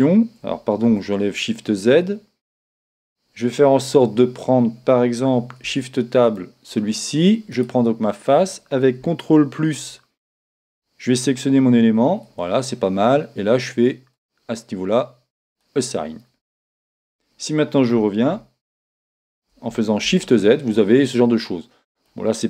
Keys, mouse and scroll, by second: 0.9 shift+z, 2.7 a, 6.3 ctrl+Tab, 7.5-9.8 right drag, 9.8 ctrl+KP_Add, 14.1-20.0 drag, 17.0 Tab, 20.0 shift+a, 20.0 shift+z, 21.1-22.4 middle drag.